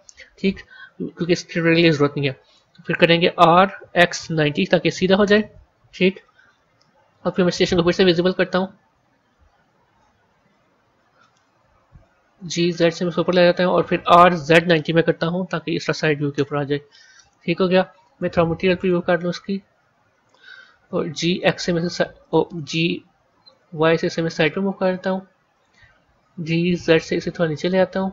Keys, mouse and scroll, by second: 3.1 r, 7.3 click, 8.2-9.0 scroll down 12, 10.2 KP_3, 10.9-11.8 scroll down 2, 11.8 g, 13.9 r, 17.9 z, 20.8 g, 23.4 g.